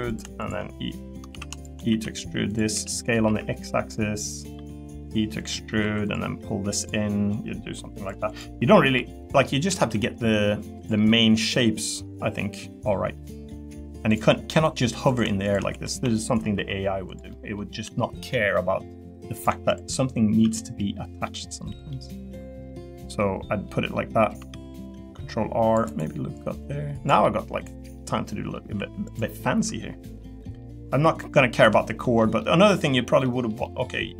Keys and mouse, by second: 1.3 ctrl+z, 1.9 e, 2.7 s, 3.2 x, 4.4 click, 4.5 e, 5.4 click, 6.0 click, 6.0 2, 6.7 click, 7.3 click, 8.3 click, 8.8 l, 9.3 middle click, 9.7 a, 9.9 g, 10.7 click, 11.1 middle click, 11.8 middle click, 12.6 middle click, 13.1 middle click, 15.5 shift+click, 15.7 3, 16.3 shift+click, 16.5 e, 17.3 middle click, 17.9 shift+click, 18.5 middle click, 19.3 click, 19.7 shift+click, 20.4 e, 21.9 middle click, 23.1 middle click, 24.5 ctrl+r, 27.2 middle click, 27.9 middle click, 28.7 3, 29.1 click, 30.2 middle click, 31.2 middle click, 31.6 Tab, 32.0 middle click, 33.2 middle click, 33.6 middle click.